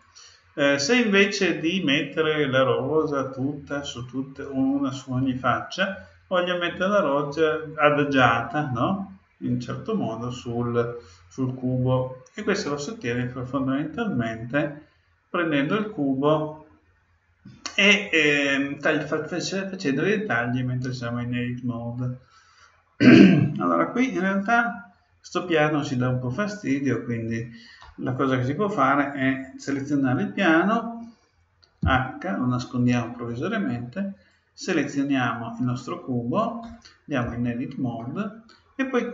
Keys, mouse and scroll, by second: 12.6-14.5 middle drag, 25.4-27.4 right drag, 31.8 h, 34.1-35.9 right drag, 35.2-37.1 middle drag, 37.2 Tab, 37.9-39.1 middle drag.